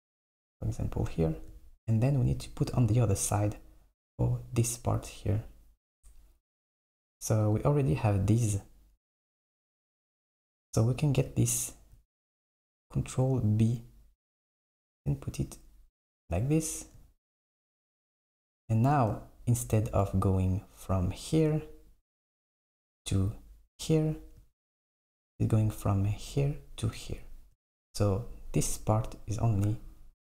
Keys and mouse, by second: 7.4 click, 9.1 click, 9.6 alt+click, 12.5 ctrl+b.